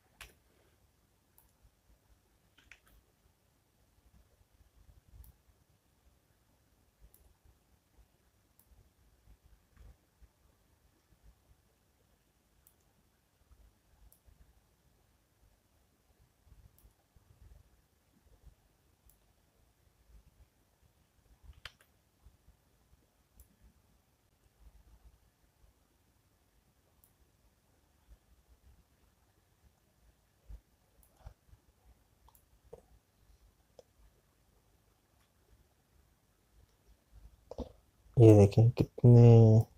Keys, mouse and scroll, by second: 13.9 click, 19.6 click.